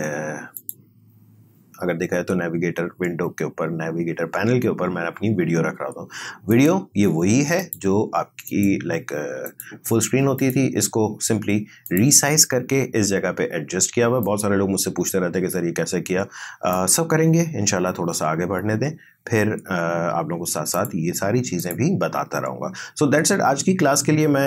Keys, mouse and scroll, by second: 0.6 click, 6.5 click, 14.2-19.0 drag, 20.8 click.